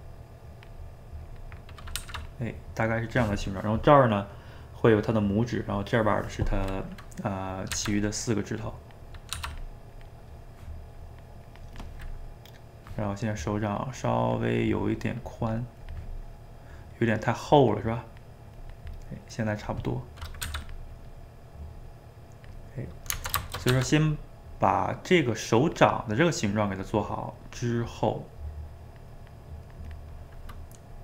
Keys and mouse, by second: 2.0 f, 2.6-5.6 drag, 7.1 middle click, 7.7 f, 8.6 click, 9.3 f, 9.9 click, 10.3 middle click, 10.9-12.0 drag, 12.0-13.5 middle drag, 13.5-15.0 drag, 15.0 middle click, 15.4 click, 16.1 middle click, 17.1-19.1 drag, 19.1 middle click, 19.7 click, 19.9 middle click, 20.5 f, 20.9 middle click, 21.8-22.9 drag, 22.9 middle click, 23.7 f, 24.5-26.2 drag, 26.2 middle click, 26.8-28.2 drag, 28.2 middle click, 28.6-30.3 drag, 30.3-31.0 middle drag.